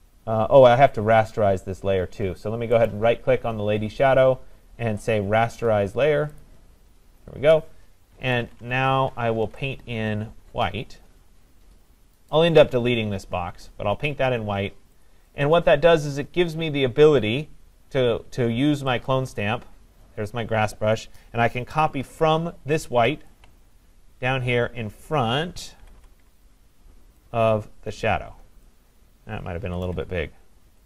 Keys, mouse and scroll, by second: 2.9 right click, 6.4 click, 8.2-9.4 typing, 14.1 click, 15.1 click, 15.4 click, 19.1 click, 23.3 alt+click, 25.8 [, 26.0 [, 28.6 click, 29.7 [, 29.9 [, 30.1 [.